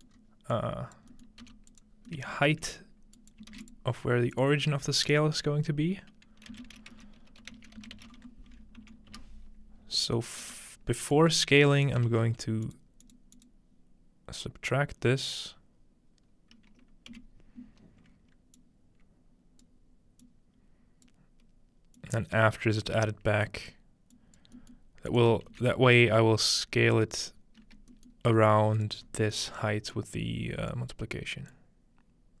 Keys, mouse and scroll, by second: 0.1-1.4 drag, 0.1 scroll up 1, 1.4 typing, 1.7 scroll up 1, 1.8-6.1 drag, 1.9 scroll down 1, 3.5 shift+a, 6.5-8.6 typing, 10.4-15.1 drag, 12.1 shift+d, 17.1 s, 18.6-19.7 drag, 20.2-21.1 drag, 22.0-23.1 drag, 23.5 click, 24.1-26.8 drag, 24.6-26.2 middle drag, 25.5 shift+d, 27.0-28.5 right drag, 27.3-27.7 scroll down 2, 27.7 scroll up 3, 27.9 middle click, 28.3 g, 29.1 scroll up 2, 29.9-30.7 drag, 31.5-32.4 drag.